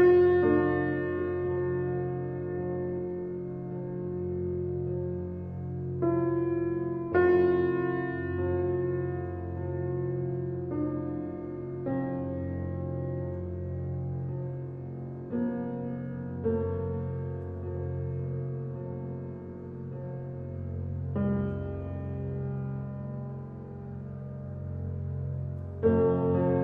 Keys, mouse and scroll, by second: 2.1 e, 5.5 middle click, 6.0-6.3 scroll up 2, 6.3 shift+middle click, 7.1 s, 9.2 e, 12.8 f, 13.3-15.0 middle drag, 15.0-15.7 scroll down 5, 15.7 Tab, 16.0-17.3 middle drag, 17.3-18.0 scroll down 1, 18.0-19.2 middle drag, 19.2-19.5 scroll up 1, 19.5 click, 21.4 click, 22.0 click, 23.6 click, 24.2-25.8 middle drag, 25.8 click.